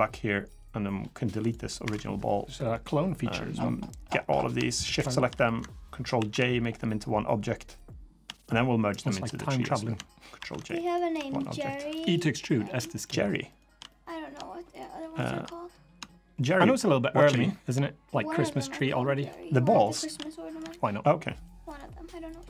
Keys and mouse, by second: 1.2 click, 1.6 Delete, 2.5-4.3 drag, 4.7 shift+click, 5.9 ctrl+j, 6.8-7.2 middle drag, 6.9 click, 7.5 middle click, 8.1 shift+click, 9.1 middle click, 10.1 ctrl+j, 10.6-10.9 drag, 10.9 Tab, 11.2 click, 11.7 3, 11.9 drag, 12.1-12.4 middle drag, 12.8 shift+click, 13.3 shift+click, 13.7-14.1 middle drag, 14.5 shift+click, 15.3-15.7 middle drag, 16.7 shift+click, 17.0-17.5 shift+middle drag, 18.3 shift+click, 19.7 shift+click, 20.1 middle click, 21.2 shift+click, 22.1 shift+click.